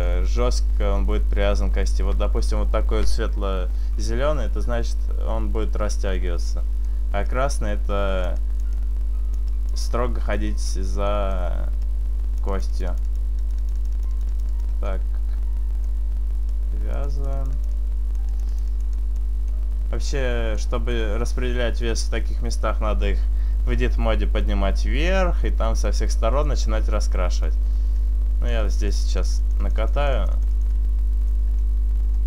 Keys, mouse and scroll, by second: 6.5 middle click, 8.1 click, 8.5 click, 8.8 click, 9.5 click, 10.4 middle click, 11.2 middle click, 11.9 click, 12.6 click, 13.1 click, 13.6 click, 14.9 click, 14.9 middle click, 16.9 click, 17.1 click, 17.4 click, 18.4 click, 19.0 click, 19.5 middle click, 19.8 middle click, 22.8-24.3 scroll down 1, 25.3 middle click, 25.8 middle click, 28.0 click, 28.9 click, 29.7 click, 30.0 click, 31.6 click, 31.6 middle click, 32.1 middle click.